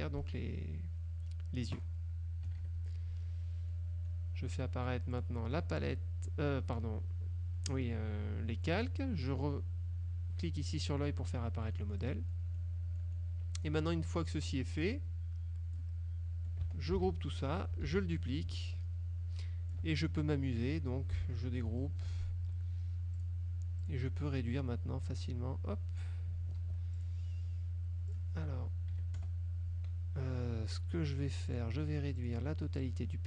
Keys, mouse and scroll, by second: 2.6 KP_Subtract, 3.8 middle click, 5.2 click, 10.8 click, 11.5 click, 12.4 click, 13.1 click, 13.7 click, 14.6 click, 14.9-16.1 drag, 17.1 ctrl+g, 18.0 ctrl+d, 18.3-20.0 ctrl+drag, 21.8 ctrl+shift+g, 23.2 click, 23.9 click, 25.4 ctrl+click, 26.7 ctrl+z, 27.0 ctrl+click, 28.2 click, 29.0 KP_Subtract, 29.3 KP_Add, 31.6 click, 32.3 click, 32.9-33.2 drag.